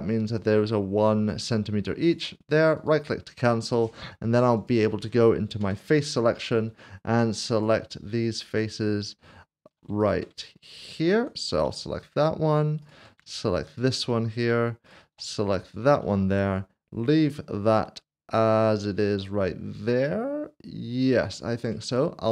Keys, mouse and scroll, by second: 2.1 click, 2.8 click, 4.6 click, 5.6 3, 6.0 click, 7.5 ctrl+click, 10.0 shift+click, 10.8 ctrl+click, 12.8 shift+click, 13.7 ctrl+click, 15.6 ctrl+click, 21.7 ctrl+click, 21.9 middle click.